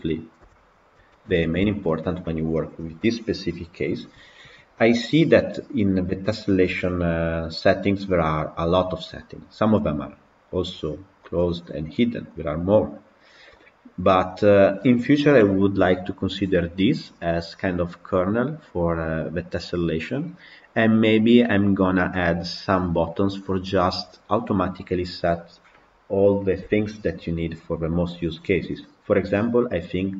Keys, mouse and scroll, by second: 0.3 KP_Decimal, 1.0-29.1 middle drag, 29.1 click.